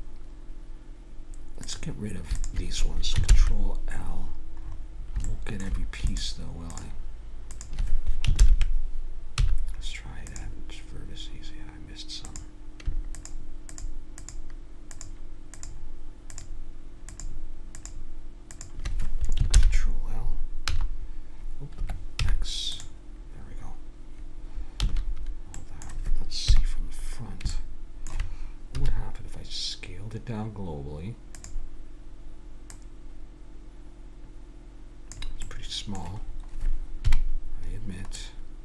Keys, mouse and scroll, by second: 1.6-3.2 right drag, 3.2 ctrl+l, 3.9 click, 4.6 middle click, 6.1-8.4 right drag, 8.4 ctrl+l, 9.4 x, 12.3 click, 19.6 ctrl+l, 20.7 z, 22.2 x, 24.8 a, 25.6-27.5 middle drag, 26.4 KP_1, 27.7 middle click, 28.7 s, 32.7-35.1 drag, 35.4 middle click, 37.0 KP_Decimal.